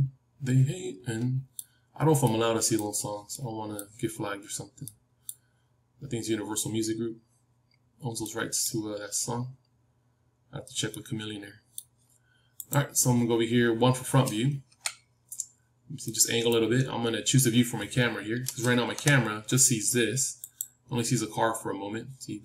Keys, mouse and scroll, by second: 3.0-13.0 middle drag, 13.0-14.6 drag, 14.6 KP_1, 15.3 scroll up 1, 15.5-19.9 middle drag, 18.9 KP_0, 20.3-22.4 drag.